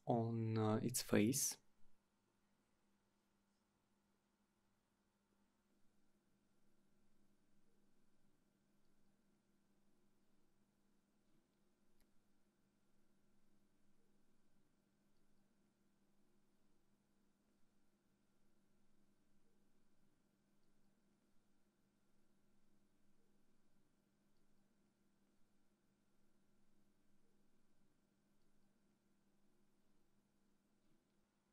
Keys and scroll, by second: 11.5 Return, 29.2-30.7 typing.